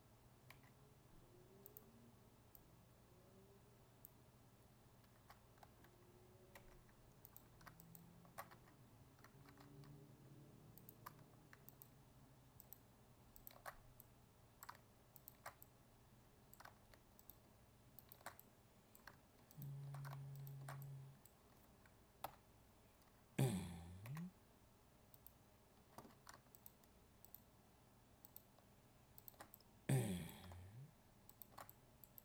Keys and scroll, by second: 6.5 ctrl+r, 9.4 ctrl+Tab.